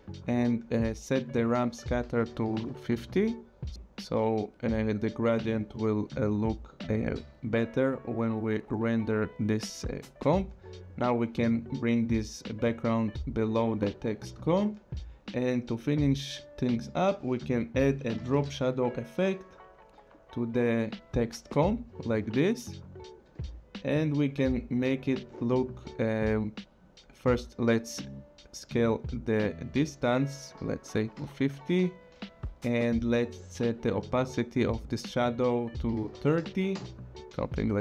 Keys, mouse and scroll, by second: 2.2 click, 2.4 5, 2.5 KP_0, 3.2 click, 3.7 Return, 8.0 click, 16.6 click, 17.9-18.9 typing, 20.1 click, 22.6 scroll, 23.3 click, 24.1 scroll, 24.6 click, 28.0 click, 31.1 5, 31.2 KP_0, 31.8 Return, 32.2 click, 34.0 click, 35.3 click, 35.9 KP_3, 36.0 KP_0, 36.7 Return, 37.1 click.